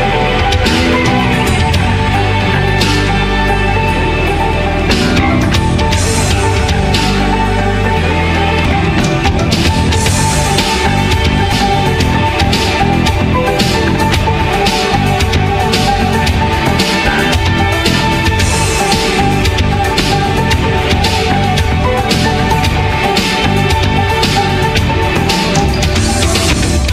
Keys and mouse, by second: 0.7 Tab, 1.0 a, 1.8 middle click, 2.7 middle click, 3.7 x, 4.0 Tab, 4.5 middle click, 4.7 h, 5.5 middle click, 5.9 q, 6.3-7.3 middle drag, 7.3 a, 8.4 middle click, 9.4 middle click, 9.9 r, 10.5 middle click, 11.0 ctrl+a, 11.4-17.0 middle drag, 17.0 z, 17.6 a, 18.0 middle click, 18.7 middle click, 19.4 ctrl+a, 21.5 s, 22.2 alt+s, 22.6 a, 24.0 middle click, 24.5 middle click, 24.6 g, 25.4 s, 26.0 z, 26.6 middle click, 26.7 s.